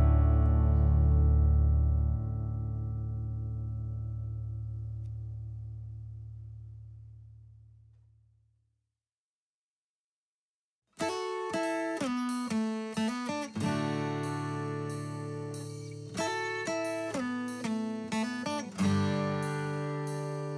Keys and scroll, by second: 0.4-1.5 Left, 3.4 a, 5.4-7.8 typing, 8.6 Escape, 14.0-16.4 typing, 17.4-20.5 typing.